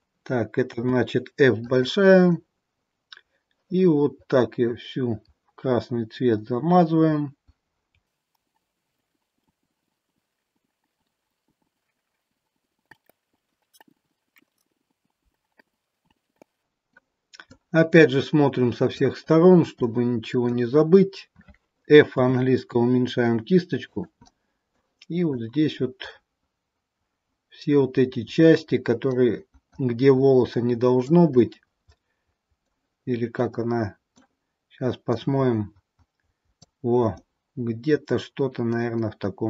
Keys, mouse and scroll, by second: 0.6 f, 2.4 click, 13.0 click, 13.3 scroll down 2, 13.3 middle click, 13.8 click, 15.6 click, 16.4 middle click, 17.6 click, 19.7 middle click, 20.8-22.1 scroll up 5, 22.1 f, 24.2 middle click, 24.5 middle click, 25.4 click, 31.3 middle click, 33.5 middle click, 35.2 click, 37.2 middle click.